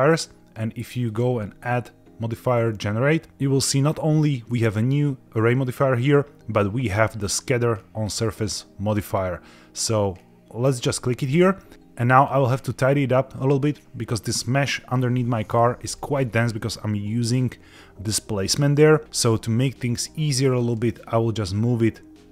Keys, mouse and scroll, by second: 1.0-10.9 drag, 11.7 middle click, 11.7-12.2 scroll down 1, 12.2-13.7 scroll up 3, 13.7-14.1 scroll down 1, 15.1-15.5 middle drag, 15.8-16.5 scroll up 4, 19.0-20.6 scroll down 4, 20.6-22.3 drag.